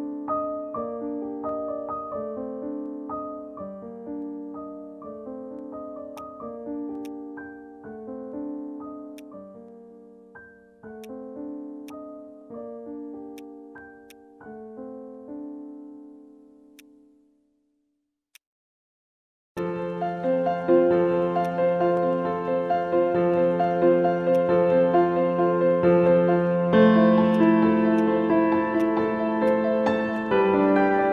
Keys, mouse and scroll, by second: 3.1 scroll up 1, 3.6 scroll up 1, 3.7 alt+middle click, 4.0-4.4 scroll down 1, 8.8 ctrl+z, 11.3 alt+click, 11.3 alt+middle click, 16.5 ctrl+z, 18.0 scroll up 1, 18.9 alt+scroll up 1, 19.0-19.4 scroll down 1, 23.1 scroll up 1, 24.0 scroll up 1, 24.0 alt+middle click, 27.0 scroll down 1, 27.3 alt+click, 27.7 alt+middle click, 28.0 alt+click, 28.5 alt+middle click, 28.8 alt+click, 29.2 alt+middle click, 29.5 alt+click.